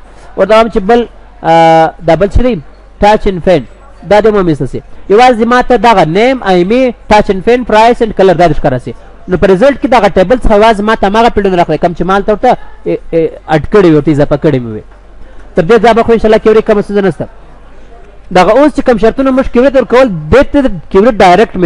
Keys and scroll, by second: 17.8 ctrl+s, 21.2 ctrl+s.